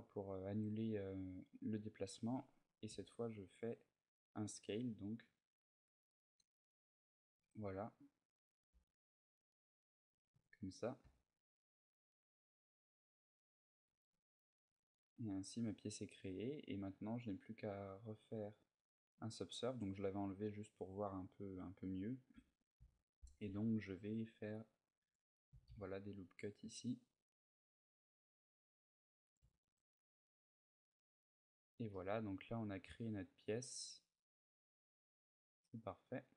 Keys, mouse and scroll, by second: 1.3 middle click, 2.6 s, 7.1 click, 7.2 z, 7.6 middle click, 8.5 s, 9.7 click, 9.9 a, 10.1 Tab, 10.4 middle click, 10.8 z, 11.0 middle click, 13.6 Tab, 13.9 middle click, 14.5 Tab, 14.8 middle click, 15.8 middle click, 15.9 middle click, 17.0 click, 19.1 middle click, 20.1 click, 20.9 middle click, 21.3 Tab, 21.7 middle click, 22.1 a, 23.2 ctrl+r, 23.2 a, 24.8 click, 25.3 s, 29.1 click, 29.2 a, 29.4 Tab, 30.1 scroll down 1, 30.7 scroll down 2, 30.7 middle click, 31.7 middle click.